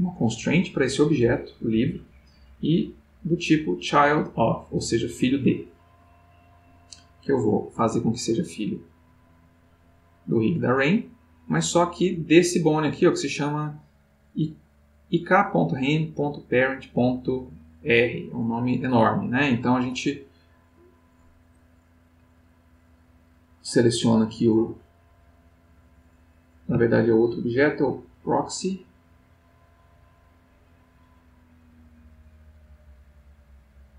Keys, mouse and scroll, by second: 0.8 click, 5.1 click, 7.2 click, 9.7 click, 11.2 click, 18.0 click, 19.1 click, 25.6 click, 27.7 click.